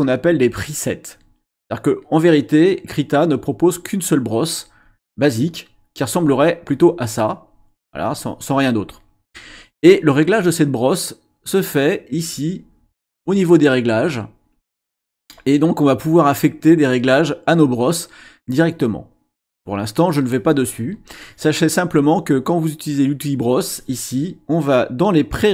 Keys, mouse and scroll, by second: 5.7 click, 7.8 click, 12.3 click, 14.5 click, 19.5 click.